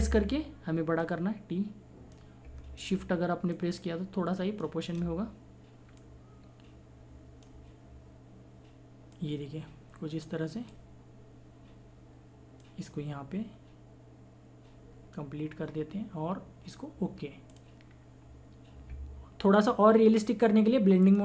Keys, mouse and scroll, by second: 1.0-3.5 drag, 3.5-12.6 shift+drag, 12.6-17.5 drag, 21.0 click.